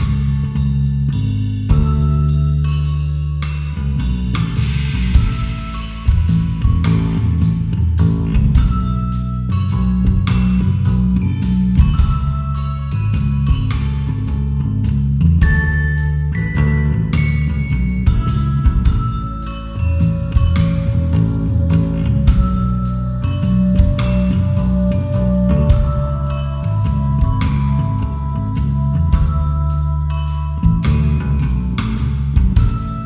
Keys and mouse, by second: 0.0-1.9 typing, 1.2 KP_Enter, 2.3 KP_Enter, 2.8 ctrl+a, 4.3 Tab, 7.4 2, 8.5 ctrl+b, 11.8 click, 12.9 ctrl+r, 15.2 click, 16.0 Tab, 16.4 right click, 18.0 ctrl+2, 19.5 g, 19.7 x, 21.8 click, 24.6-26.4 drag, 27.6-28.8 drag, 29.5-31.1 drag, 31.6-33.0 drag.